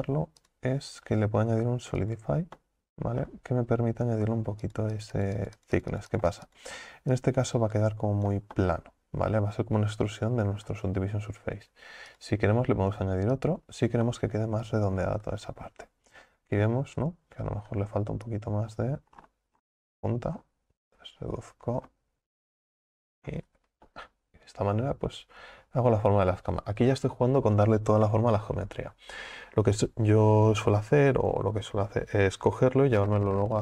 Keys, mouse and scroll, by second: 2.2-2.6 drag, 2.6-4.6 middle drag, 4.6-8.6 drag, 8.6-11.6 middle drag, 13.5-14.1 drag, 14.1-15.3 middle drag, 15.3 Tab, 15.8-16.1 scroll up 3, 16.1 right click, 18.3-21.3 drag, 23.9-27.0 middle drag.